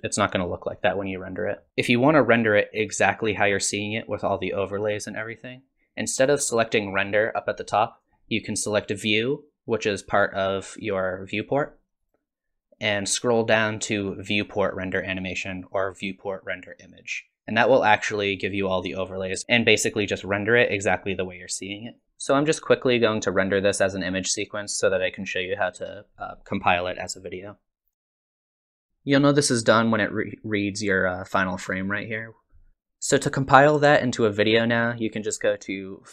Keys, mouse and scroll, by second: 6.3 click, 10.7 click, 12.0 click, 32.7 click, 35.6 click.